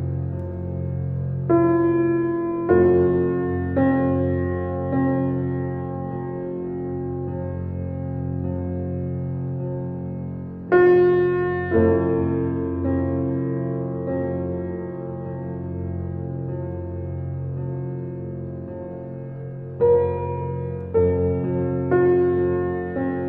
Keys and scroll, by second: 0.0 shift+space, 7.4 ctrl+d, 11.4 Right, 11.8 -, 11.9 2, 12.2 Return, 18.1 ctrl+a, 18.8-21.2 typing.